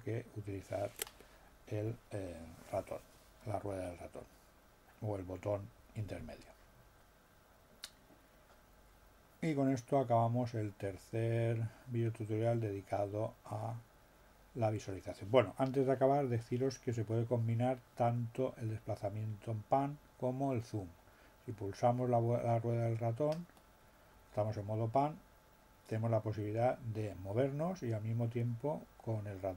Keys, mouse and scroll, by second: 23.5 middle click, 25.5 scroll down 2, 28.2 scroll down 2, 28.8 scroll up 2, 29.3-29.5 scroll down 2.